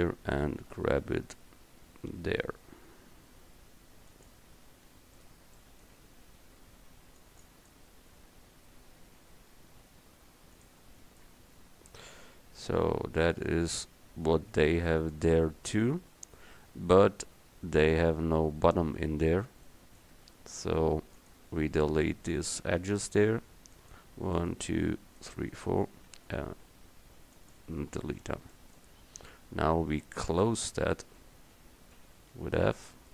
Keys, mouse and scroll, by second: 0.7 g, 4.2 g, 6.3 a, 6.8 c, 9.1 g, 11.4 Tab, 14.0 middle drag, 15.6 middle click, 20.2 Tab, 23.8-25.7 right drag, 26.2 x, 32.0 f.